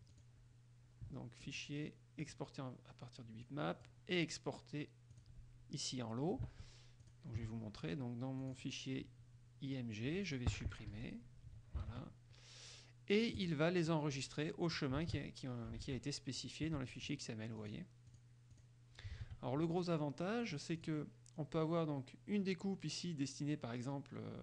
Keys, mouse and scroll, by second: 0.3 click, 2.4 click, 3.6 click, 5.3 click, 6.7 alt+Tab, 7.2 alt+click, 8.6 click, 9.9-10.7 drag, 11.1 Delete, 12.0 alt+Tab, 13.5 click, 15.3 alt+Tab, 16.0 alt+Tab, 16.6 alt+click, 17.1 alt+click, 17.7 click, 18.3 click, 18.7 click, 19.3 alt+Tab, 20.7 click.